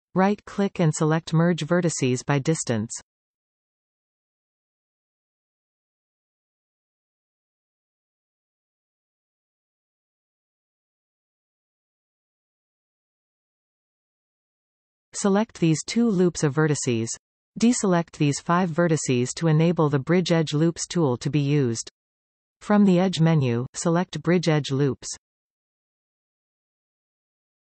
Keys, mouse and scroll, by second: 0.8 a, 1.9-4.1 right drag, 4.1-16.0 shift+middle drag, 6.5-6.8 scroll down 2, 13.6 alt+a, 16.0 alt+shift+click, 16.1-17.9 middle drag, 16.9-17.9 scroll up 2, 17.9 alt+shift+click, 18.6-21.7 middle drag, 19.5-19.8 scroll up 2, 21.7 shift+click, 22.2 shift+click, 22.8 shift+click, 23.4 shift+click, 24.9 shift+click, 26.5 shift+click.